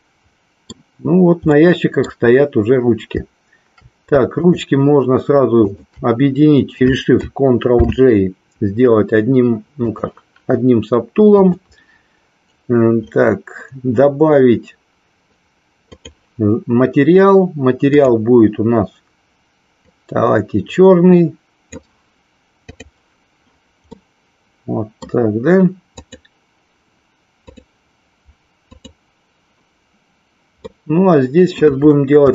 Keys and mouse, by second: 1.6 middle click, 5.5 shift+click, 9.8 click, 11.3 click, 15.9 click, 17.9 click, 23.0 click, 24.0-25.1 middle drag, 27.4 click, 28.6 click, 30.5-31.8 middle drag.